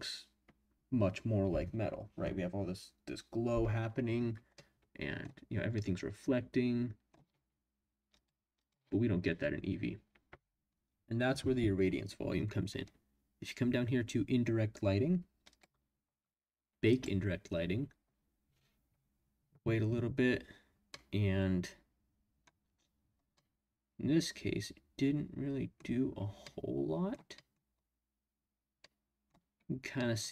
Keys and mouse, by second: 4.5-5.2 middle drag, 5.8-7.1 middle drag, 8.1-9.2 drag, 15.5 click, 20.9-22.4 middle drag, 23.3-25.9 drag, 26.4-27.1 drag, 27.3 drag, 28.8-29.3 middle drag, 29.9-30.3 middle drag.